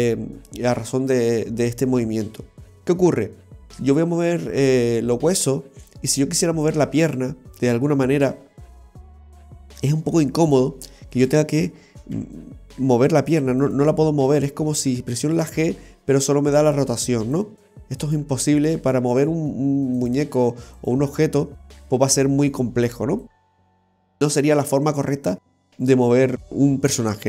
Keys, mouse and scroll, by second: 11.2 right click, 12.2 g, 13.7 right click, 13.7 g, 18.1 right click, 18.3 g, 20.8 right click, 21.0 g, 26.3 alt+g, 26.3 a, 26.4 alt+g.